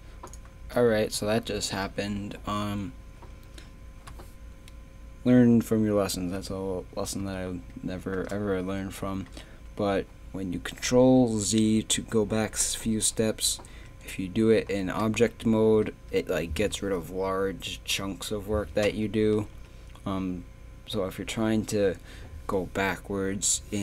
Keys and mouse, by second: 0.5 Tab, 1.2 a, 9.5 Tab, 13.1 KP_3, 13.7 Tab, 15.1 Tab, 19.5 Tab.